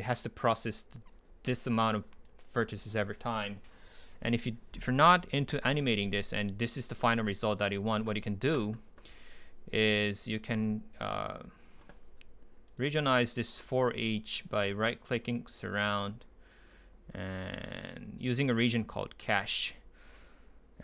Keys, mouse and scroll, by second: 2.3-4.6 right drag, 6.7-12.7 drag, 12.7-13.3 right drag, 13.3-14.5 drag, 14.5-15.2 right drag, 15.2-17.3 drag, 18.8-20.7 drag.